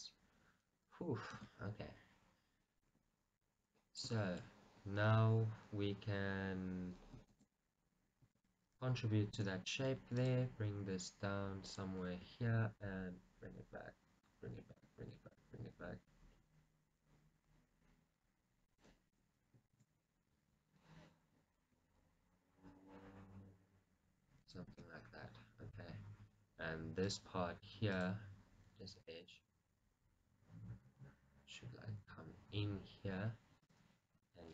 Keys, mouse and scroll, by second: 1.6 shift+z, 1.9-3.1 scroll up 1, 3.1 KP_1, 3.9-4.3 scroll down 1, 4.3 shift+middle click, 7.5 shift+z, 9.7 ctrl+r, 11.9 click, 12.6 g, 19.0 click, 21.9 g, 24.6 click, 25.2 shift+z, 25.3-26.3 scroll up 2, 26.3-27.1 scroll up 1, 27.1 scroll, 27.2 click, 28.1 click, 29.4 g.